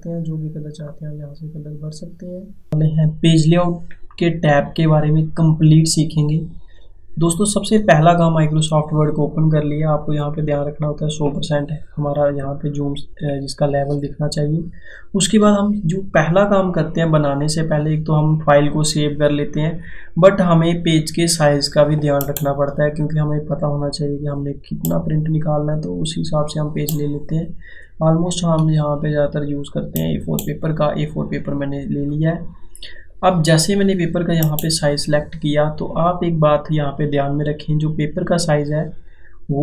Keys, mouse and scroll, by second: 10.0 click.